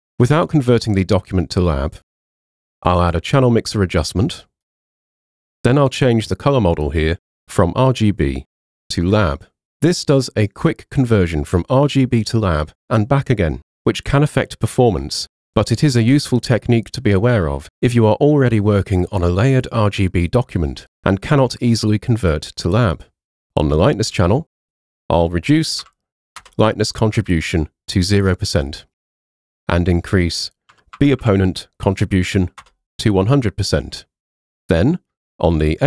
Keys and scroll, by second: 25.9 o, 26.4 Return, 30.8 1, 31.0 0, 32.7 Return.